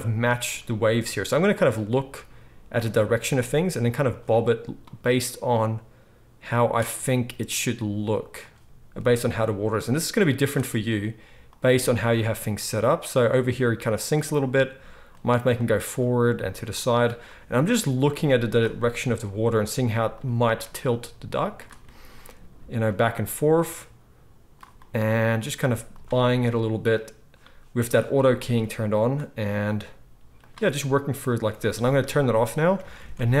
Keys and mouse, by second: 3.5 r, 4.1-4.8 middle drag, 4.8-8.4 drag, 7.7 r, 8.4-9.4 middle drag, 9.4-11.5 drag, 10.9 r, 11.5-12.1 middle drag, 12.1-15.2 drag, 14.4 r, 15.2-17.3 middle drag, 16.2 r, 17.3-20.2 drag, 19.3 r, 20.2-20.9 middle drag, 20.9-22.9 drag, 22.3 r, 22.9 middle click, 23.5-26.0 drag, 25.4 r, 26.0-28.5 middle drag, 28.5-30.5 drag, 29.7 r, 30.5-31.2 middle drag, 31.2 click, 31.3-33.4 middle drag, 32.8 alt+a.